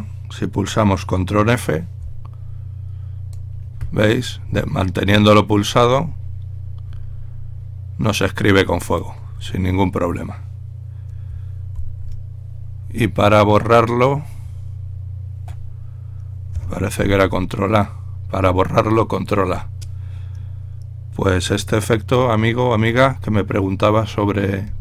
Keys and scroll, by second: 2.4 ctrl+f, 2.4 typing, 2.8 ctrl+f, 17.4 ctrl+a, 24.7-24.8 typing.